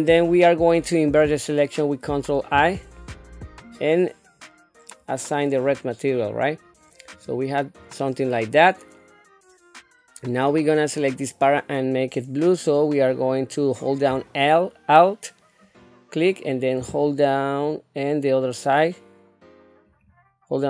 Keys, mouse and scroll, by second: 2.5 ctrl+i, 5.6 click, 7.1 click, 15.6 alt+click, 19.9 alt+shift+click.